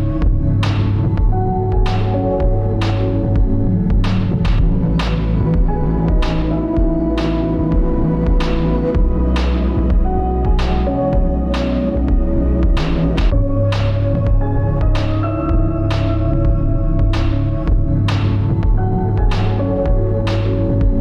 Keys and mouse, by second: 0.4 alt+shift+click, 1.2 alt+shift+click, 4.3 alt+shift+click, 7.2 g.